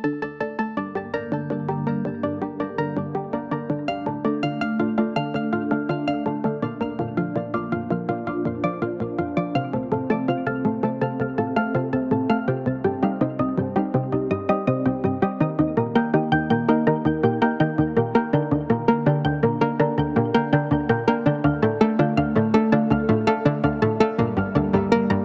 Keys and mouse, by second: 3.7 middle click, 4.5 Tab, 5.0-5.4 middle drag, 5.6 s, 9.0-10.0 middle drag, 10.2 s, 11.2-13.0 drag, 15.1 ctrl+a, 15.3-16.3 right drag, 16.9-17.5 drag, 16.9-17.5 right drag, 17.8 shift+middle drag, 18.5 middle click, 19.4-19.7 middle drag, 20.2 shift+d.